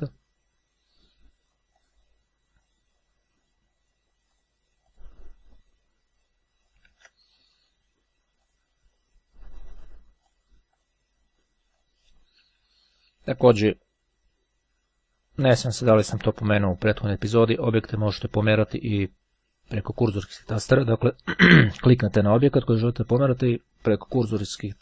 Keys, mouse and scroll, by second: 1.8 click, 4.4 click, 6.8 ctrl+z, 8.5 click, 10.4-11.6 drag, 11.9 click, 12.6 Down, 16.0 Left, 18.3 Right, 19.8 Right, 21.6 click, 22.4 click, 22.6 Left, 23.7 Right, 24.5 Up.